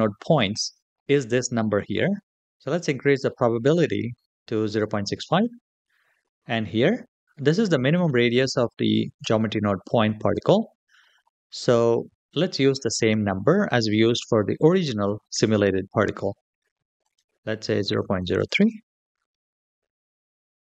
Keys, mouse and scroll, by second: 12.6-15.6 drag, 16.8-18.8 drag.